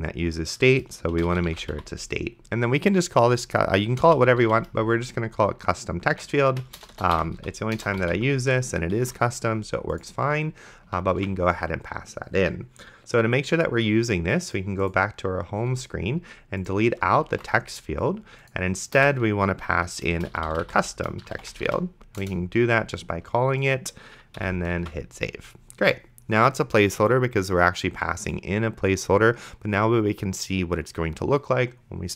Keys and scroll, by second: 1.0-2.3 typing, 3.8-5.0 typing, 6.2-8.7 typing, 9.2 ctrl+s, 11.4 ctrl+s, 17.6 ctrl+x, 19.0 Return, 20.1-22.2 typing, 22.2 Return, 24.4 ,, 25.0 ctrl+s.